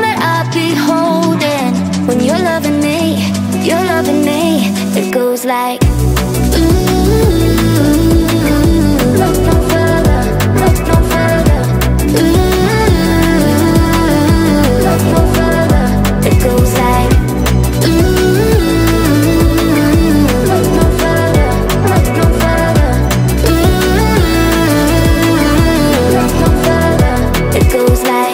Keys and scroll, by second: 13.2 Delete, 13.9 space, 24.2-26.2 typing.